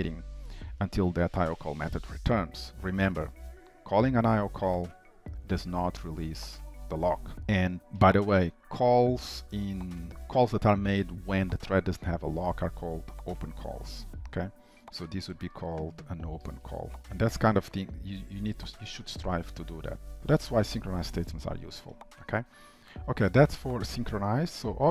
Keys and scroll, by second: 17.1 ctrl+s, 24.6 alt+Up.